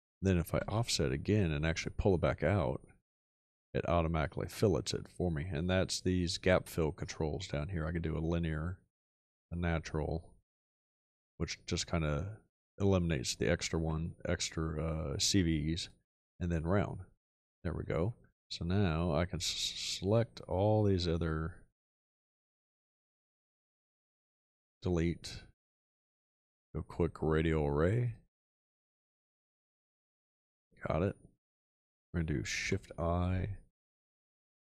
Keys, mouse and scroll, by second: 0.5 o, 24.3 x, 29.7 click, 32.6 shift+i.